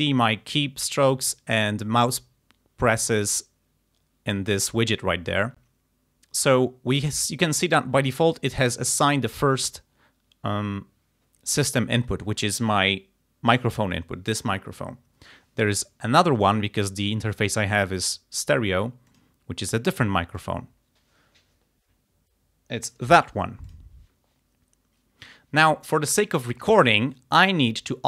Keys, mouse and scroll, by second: 8.5 click, 12.5 click, 16.5 click, 19.1 click, 20.4 click, 23.7 click.